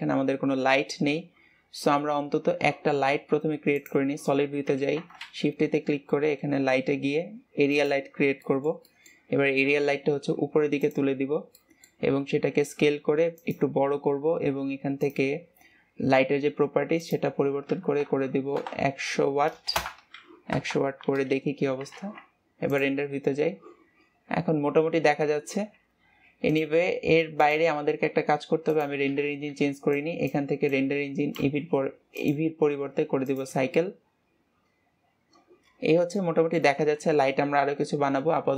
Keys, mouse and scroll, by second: 3.7 click, 4.3-6.6 scroll down 1, 6.6-7.8 scroll down 1, 7.8 shift+a, 8.0-8.4 scroll down 2, 8.4 middle click, 9.2-9.6 scroll down 4, 9.6 g, 11.2 scroll down 2, 11.5 middle click, 12.2 s, 19.7 KP_0, 20.5 KP_0, 21.4-22.6 scroll up 2, 22.6 scroll up 1, 22.8 click, 33.5-35.2 drag, 36.2 shift+middle click, 37.0 ctrl+s.